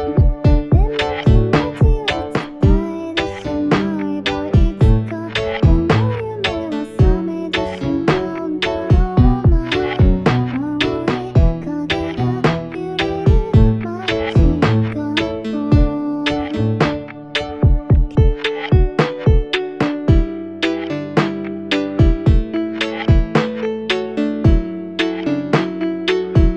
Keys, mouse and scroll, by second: 3.5 typing, 6.4 F9, 20.7 ctrl+a.